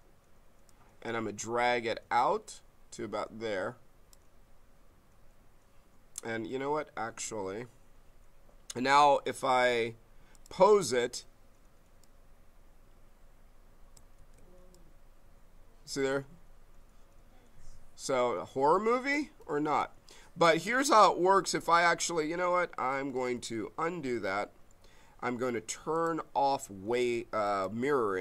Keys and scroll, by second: 14.2 ctrl+z, 19.4 ctrl+z, 23.3 ctrl+z.